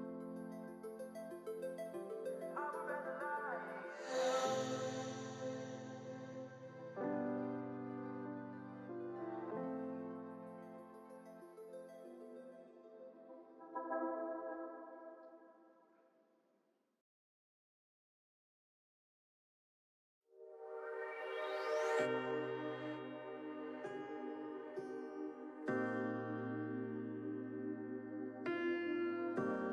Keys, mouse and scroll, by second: 0.7 g, 2.2 click, 2.4-3.3 scroll down 5, 3.3 alt+z, 3.5 middle click, 3.8 click, 3.9 scroll down 4, 4.1 Tab, 4.2 click, 4.4-5.1 middle drag, 5.1 scroll up 5, 5.4-6.8 middle drag, 6.9-7.3 scroll down 6, 7.3 scroll up 6, 7.6-8.1 middle drag, 8.1-8.6 scroll up 3, 8.6-9.6 middle drag, 9.6-10.1 scroll up 2, 10.1 scroll down 3, 10.3 click, 10.8 KP_1, 11.1-11.4 scroll up 2, 11.4 scroll down 2, 11.6 shift+middle click, 11.7 Tab, 12.1 alt+z, 12.6 click, 13.4 shift+s, 14.1 Tab, 14.3-15.1 right drag, 15.1 click, 15.4 click, 15.7 Tab, 16.1 click, 17.1 shift+s, 17.7 Tab, 17.9-18.7 right drag, 18.7 scroll down 4, 18.9 middle click, 19.2 click, 19.4 middle click, 19.9 shift+c, 20.5 alt+z, 20.7 click, 21.2 click, 21.3-21.7 scroll up 3, 22.5-24.0 middle drag, 24.0-24.3 scroll up 4, 24.3 scroll down 1, 24.6-25.8 middle drag, 25.8 r, 27.1-27.5 middle drag, 27.5 click, 27.8 ctrl+z, 28.0 ctrl+z, 28.4 ctrl+z, 28.6 click, 28.8-29.3 scroll down 3, 29.3-29.7 middle drag.